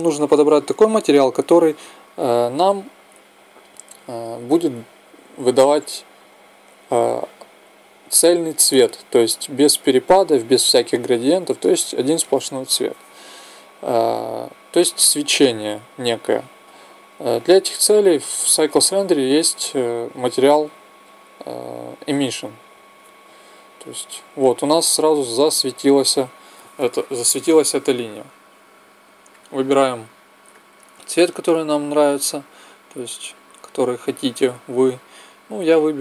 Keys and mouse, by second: 16.6-31.1 drag, 31.1-36.0 middle drag.